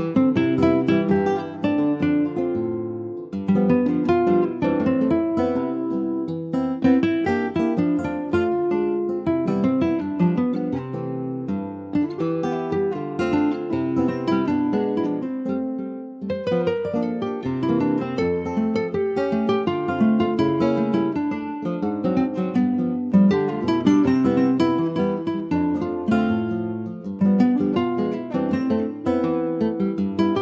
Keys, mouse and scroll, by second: 0.9 click, 1.5 click, 2.5 click, 3.2 alt+middle click, 4.0 middle click, 4.5 alt+z, 4.8 click, 5.8 2, 5.9 click, 6.9 alt+shift+click, 7.4 alt+middle click, 7.6 alt+scroll up 1, 7.9 alt+middle click, 8.5 ctrl+s, 8.8 alt+middle click, 9.1-9.7 alt+scroll up 3, 9.7 shift+middle click, 10.1 alt+z, 10.5 click, 14.3 ctrl+b, 18.8 alt+z, 19.8 click, 21.5 s, 24.8-26.5 middle drag, 26.5 ctrl+s, 27.8 ctrl+s, 28.3 click, 28.9 Tab, 29.6 Tab, 30.1 click.